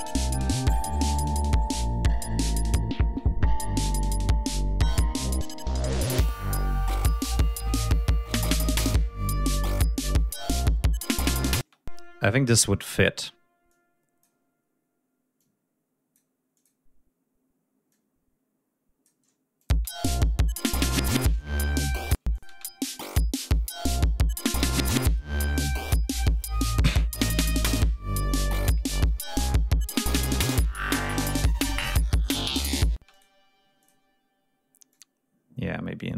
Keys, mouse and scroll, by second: 2.3 ctrl+scroll down 2, 4.6 ctrl+scroll down 2, 4.9 ctrl+scroll up 2, 6.9 ctrl+scroll down 2, 7.2 ctrl+scroll up 2, 9.2 ctrl+scroll up 2, 11.4 d, 11.5 space, 12.4 click, 13.6 click, 15.3 click, 16.5 click, 17.8-19.2 drag, 19.5 click, 19.7 space, 21.5 ctrl+scroll down 2, 22.1 ctrl+space, 22.3 ctrl+click, 22.7 ctrl+scroll up 2, 25.5 ctrl+scroll down 2, 25.9 ctrl+scroll up 2, 26.2 ctrl+scroll down 2, 26.8 ctrl+scroll up 2, 28.8 ctrl+scroll down 2, 29.3 ctrl+scroll up 2, 32.9 ctrl+space, 33.1 ctrl+click, 33.7 click, 34.8-36.1 drag.